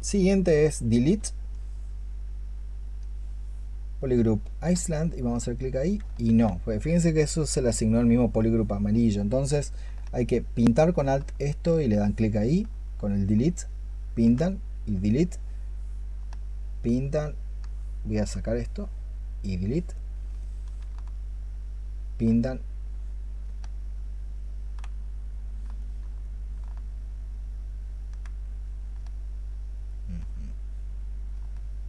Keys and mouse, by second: 1.5-4.5 space, 9.8 alt+click, 13.0 alt+click, 16.5 alt+click, 19.8 double click, 20.2 alt+click, 21.3 alt+click, 27.0 alt+click, 27.1 alt+click.